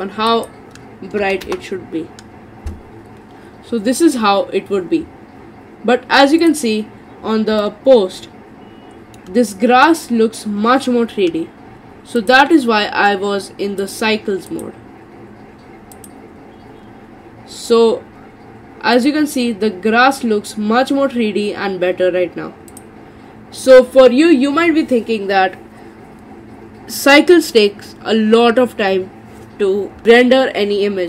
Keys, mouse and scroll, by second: 6.4 click, 7.1-7.6 scroll up 3, 7.6-10.7 middle drag, 12.2 click, 13.8-16.1 drag, 19.0 click, 22.7 click.